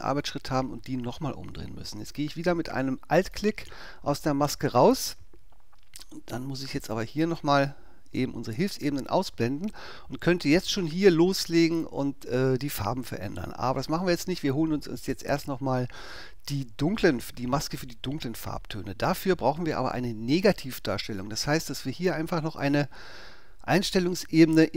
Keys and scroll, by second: 0.1 super+i.